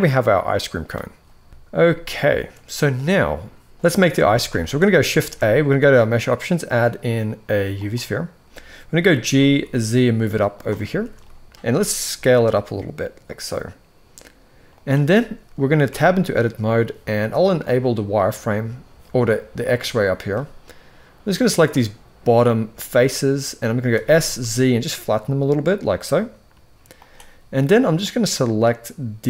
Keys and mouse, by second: 1.5 alt+a, 1.5 KP_1, 1.9 shift+middle drag, 3.9 alt+a, 4.2 shift+middle drag, 4.9 shift+a, 8.7 g, 10.5-10.8 shift+middle drag, 11.3 s, 15.5 Tab, 17.6 click, 20.9 click, 21.4-22.7 drag, 23.6 s, 27.9-29.2 drag.